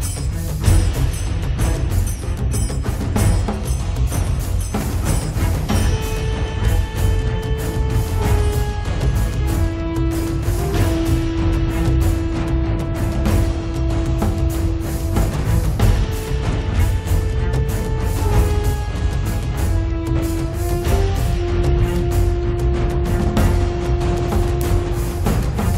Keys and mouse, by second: 0.3 click, 0.7-1.8 drag, 2.0 click, 3.1 f, 3.4-5.6 drag, 5.3 f, 5.6 f, 6.6 click, 7.4 f, 8.4-10.5 drag, 10.8 click, 10.9-12.9 middle drag, 12.9 z, 13.1 z, 14.8 middle click, 14.9 click, 15.6 right click, 16.0 click, 16.9 middle click, 17.0 click, 17.5 middle click, 17.6 click, 18.1-20.6 middle drag, 20.6 click, 20.8-22.4 middle drag, 21.1 click, 21.1 right click, 22.4-24.3 drag, 22.5-24.7 middle drag, 22.5-24.3 right drag, 24.4-25.5 drag, 24.4-25.5 right drag, 25.5 middle click.